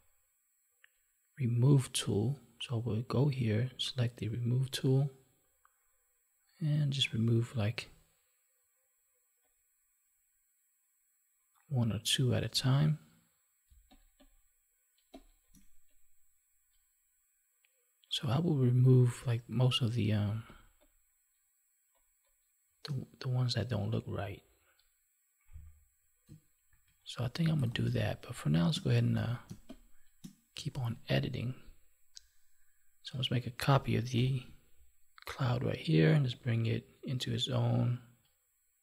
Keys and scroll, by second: 13.6 space, 20.2 space, 26.6 ctrl+1, 27.7 space, 29.1 ctrl+s, 29.4 space, 30.7 ctrl+s, 34.1 ctrl+j.